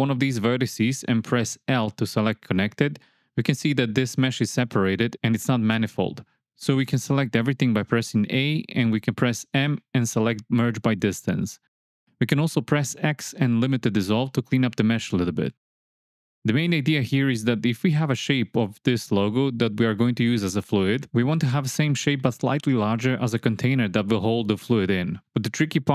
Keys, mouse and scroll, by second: 0.0 click, 1.1 l, 2.5 g, 5.1 a, 6.3 m, 9.1 click, 10.9 x, 16.9 Tab, 23.0 KP_7.